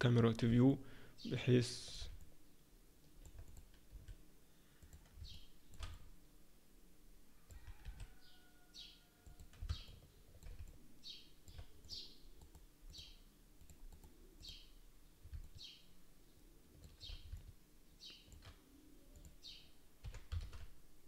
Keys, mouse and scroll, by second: 0.7 ctrl+middle click, 2.2 middle click, 3.5 click, 3.9 s, 5.3 shift+middle click, 5.9 middle click, 7.8 s, 9.9 ctrl+middle click, 10.6 middle click, 11.9 click, 12.4 right click, 13.5 click, 13.9 right click, 15.3 shift+middle click, 17.3 shift+middle click, 19.1 click, 20.0 g.